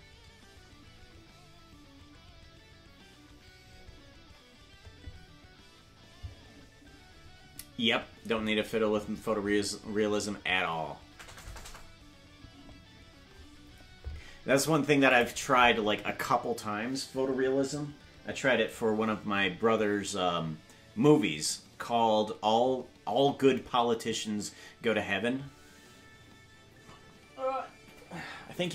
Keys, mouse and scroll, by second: 15.1 click.